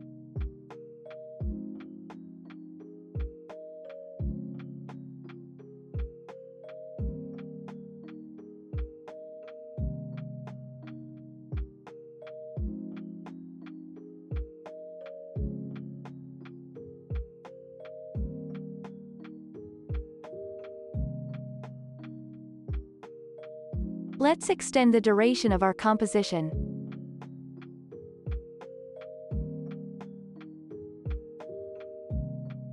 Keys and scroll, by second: 4.3 ctrl+s, 7.2 ctrl+v, 9.6 ctrl+c, 9.8 ctrl+v, 20.8 ctrl+s, 22.1 ctrl+s, 25.3 ctrl+k, 28.9 5, 29.5 Return, 31.1 ctrl+k, 32.5 BackSpace.